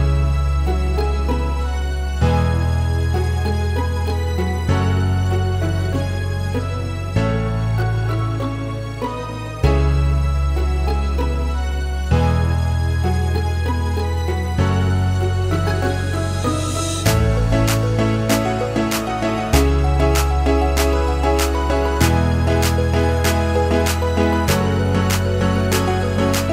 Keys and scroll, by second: 0.7 Escape, 14.5 2, 14.9 Return, 22.3 Escape.